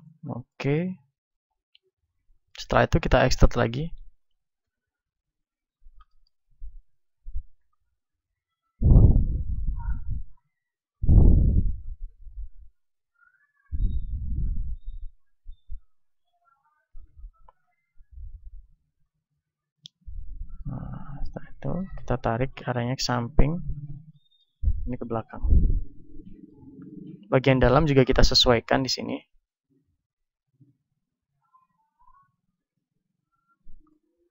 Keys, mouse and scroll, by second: 0.2 middle click, 0.9 click, 1.5 KP_1, 3.1-4.3 middle drag, 3.1 e, 4.5-9.9 drag, 4.5 s, 6.1 middle click, 8.7 ctrl+Tab, 9.9 middle click, 10.1 ctrl+Tab, 12.1-13.7 right drag, 12.9-14.7 drag, 14.7-17.4 right drag, 16.8 ctrl+Tab, 19.1 a, 20.4 z, 21.5 b, 22.2-25.5 drag, 25.1 middle click, 27.0-28.4 middle drag, 28.4-29.8 right drag, 30.5 right click, 33.8-34.3 drag, 33.8 right click.